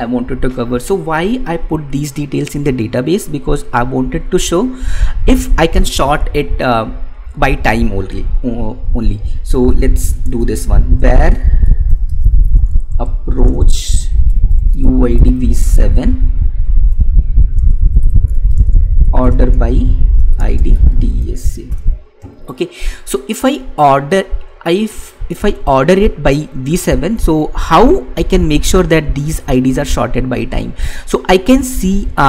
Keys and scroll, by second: 10.6 space, 13.7 space, 19.0 space, 19.7 space.